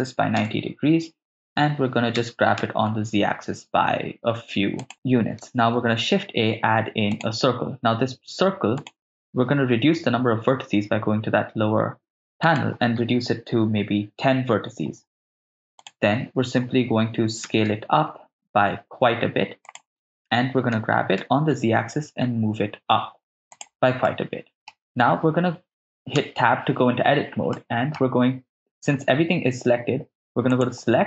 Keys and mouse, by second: 0.4 Return, 0.4 0, 2.2 g, 2.6 z, 4.8 ctrl+click, 5.8 shift+a, 8.9 click, 12.5-14.9 drag, 15.8 click, 17.5 s, 19.7 ctrl+drag, 20.7 g, 21.3 z, 23.6 ctrl+click, 24.2 middle click, 26.3 Tab, 27.6 ctrl+middle click, 30.5 click.